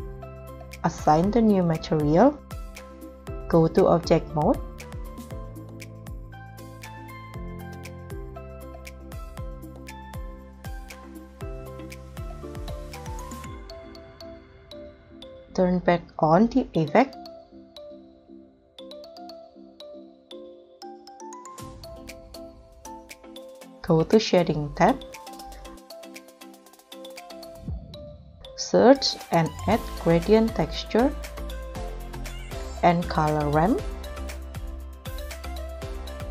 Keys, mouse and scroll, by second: 4.4 scroll down 3, 4.8 middle click, 5.0 scroll up 5, 5.2 middle click, 5.3 right click, 5.6 middle click, 5.7 scroll down 5, 5.9 scroll up 2, 6.4 middle click, 6.7-7.2 scroll up 4, 7.2 middle click, 7.5-8.0 scroll down 4, 8.0 scroll up 2, 8.1 middle click, 9.0 scroll up 6, 9.6 scroll up 3, 10.3 g, 10.3 g, 11.3 g, 11.4 g, 12.5 scroll down 8, 14.9 scroll up 2, 15.4 double click, 17.1 scroll down 1, 17.7 scroll up 1, 18.2 KP_0, 18.2 scroll down 6, 18.5-18.9 scroll up 1, 25.8-27.3 scroll up 8, 27.3-27.9 scroll down 8, 27.9-28.4 scroll up 7, 28.5-29.7 typing, 32.5 shift+a, 34.0 o, 34.1 l, 34.2 o.